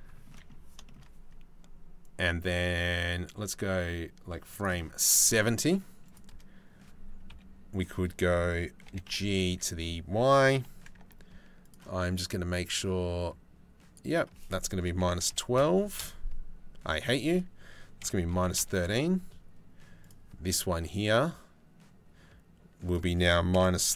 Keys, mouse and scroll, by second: 0.5 shift+middle click, 1.6-4.3 middle drag, 5.7 click, 6.9 KP_3, 8.5 g, 12.8 click, 13.7-15.6 middle drag, 16.6-18.2 middle drag, 22.5-23.9 middle drag.